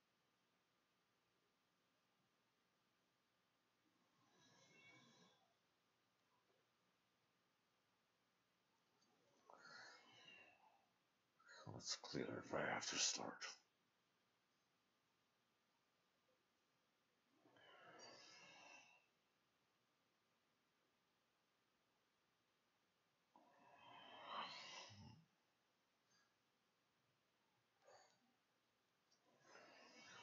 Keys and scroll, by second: 2.5 Tab, 5.5 ctrl+shift+a, 6.0 ctrl+shift+s, 6.2-7.0 typing.